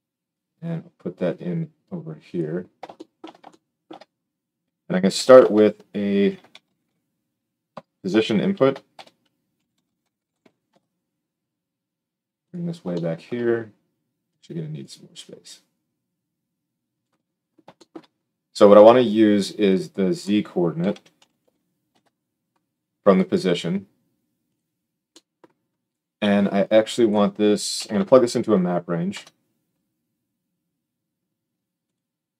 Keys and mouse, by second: 5.3 shift+a, 8.5 shift+a, 12.6-14.2 shift+drag, 24.5-26.5 drag, 32.0-32.3 drag.